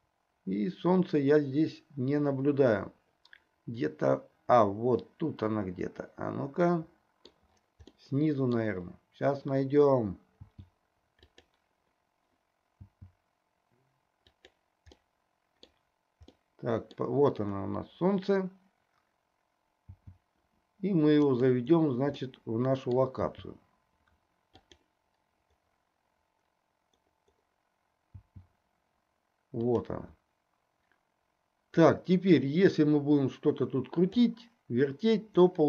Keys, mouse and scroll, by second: 8.0-8.7 middle drag, 10.4 g, 12.8 g, 15.1-15.9 middle drag, 16.5 middle click, 19.9 g, 22.4-24.9 middle drag, 23.3 g, 28.2 g, 31.9-34.4 drag.